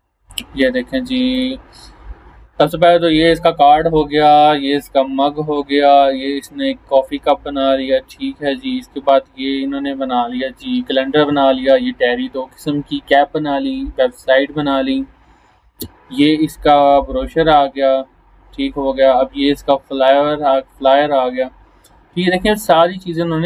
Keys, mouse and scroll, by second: 1.8 scroll down 1, 14.1 scroll down 1, 18.6 scroll down 1, 19.8 scroll up 1, 21.3 scroll up 1, 22.1 scroll down 1.